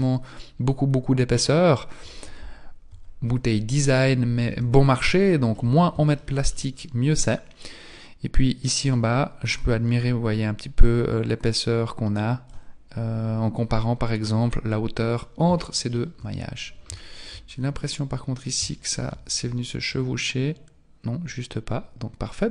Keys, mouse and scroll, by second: 2.9 KP_1, 4.5 z, 5.3 shift+middle click, 5.6-6.0 scroll down 4, 6.2 shift+middle click, 6.8-7.6 scroll up 5, 7.7-8.2 scroll up 1, 11.2 click, 15.1-15.6 scroll down 2, 15.6 shift+middle click, 15.6 scroll down 4, 16.5-17.0 scroll up 2, 17.0 shift+middle click, 17.0-18.5 scroll up 6, 18.7 shift+middle click, 19.9 click.